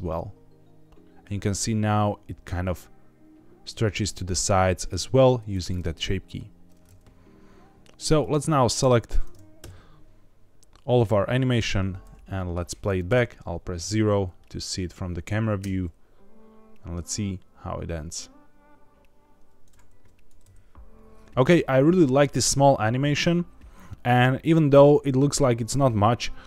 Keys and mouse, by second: 8.1 click, 8.7 a, 9.5 KP_Decimal, 11.2 click, 12.2 middle click, 13.0 KP_0, 15.5 space.